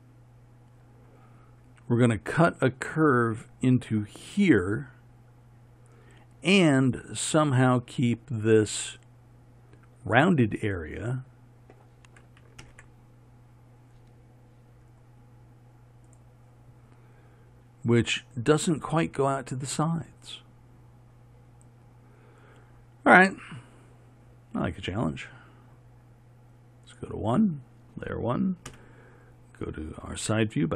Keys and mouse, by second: 12.7 ctrl+KP_3, 28.8 KP_1.